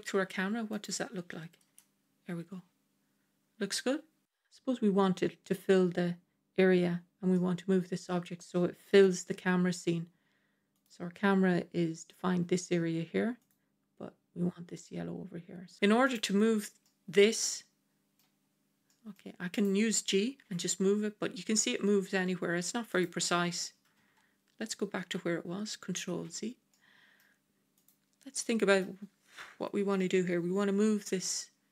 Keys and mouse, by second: 1.5 KP_0, 7.2-8.3 middle drag, 8.8 KP_0, 10.6 click, 16.0 click, 16.7-18.1 middle drag, 18.8 middle click, 19.4 click, 20.3 g, 22.5 typing, 24.8 ctrl+z, 26.6-27.1 middle drag, 27.7 click, 28.3-28.7 middle drag.